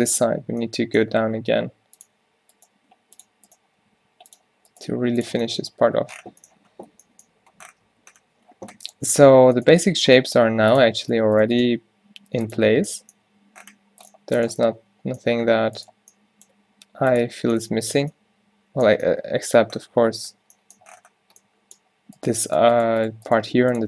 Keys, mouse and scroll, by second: 1.3 e, 3.8 g, 4.9 g, 5.3 Tab, 8.0 Tab, 10.2 g, 11.4 g, 11.7 g, 12.7 Tab, 13.3 Tab, 16.6 g, 17.3 Tab, 22.9 g, 23.4 g.